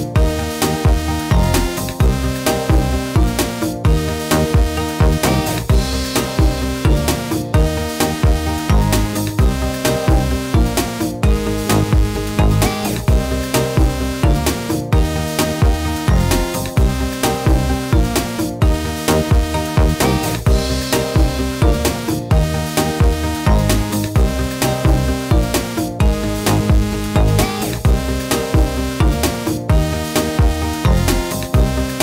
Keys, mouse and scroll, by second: 1.7 click, 19.7 click, 26.2 ctrl+z, 27.7 ctrl+z, 28.3 ctrl+z, 30.1 click.